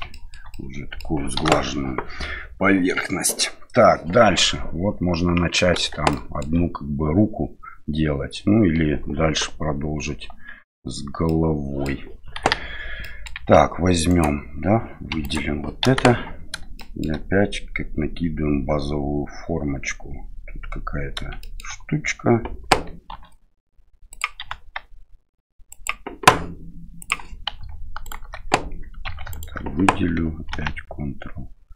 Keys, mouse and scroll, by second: 0.1 shift+middle drag, 0.5-1.0 middle drag, 1.3 KP_1, 6.1-6.4 shift+middle drag, 10.3 KP_1, 11.2-11.8 middle drag, 12.3 KP_1, 13.0 middle drag, 13.3 Tab, 14.1 right click, 15.1 3, 15.2 right click, 15.8 KP_1, 16.7 shift+middle click, 21.4 shift+middle click, 23.1 e, 24.4 s, 27.0 click, 28.0 alt+right click, 29.0 2, 29.3 right click, 30.5 ctrl+b.